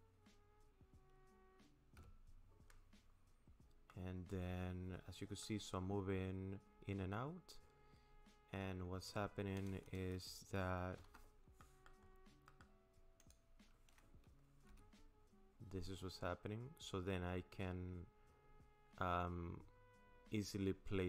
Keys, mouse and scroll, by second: 2.0 n, 3.1-3.9 scroll down 3, 3.9 middle click, 5.7-6.0 scroll up 3, 6.0-6.5 scroll down 3, 6.5 scroll up 3, 6.9 scroll down 3, 11.0 KP_0, 11.6 middle click, 12.1-12.5 scroll down 6, 12.5 middle click, 13.2 click, 14.7 g.